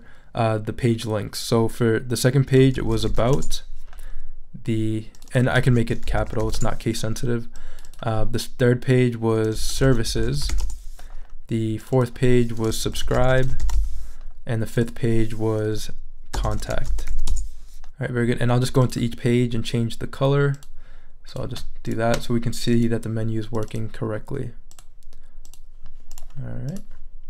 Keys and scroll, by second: 2.5-3.7 typing, 5.4-6.9 typing, 9.4-11.0 typing, 12.7-14.2 typing, 16.1-17.6 typing.